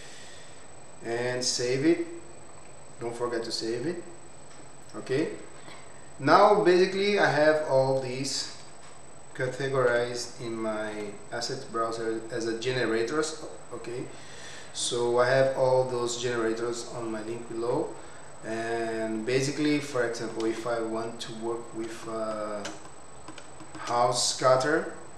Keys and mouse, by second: 9.4 n, 9.8 n, 10.9 t, 13.6 click, 20.6 middle click, 22.0 shift+middle drag, 22.9-23.3 middle drag, 23.6 shift+middle click.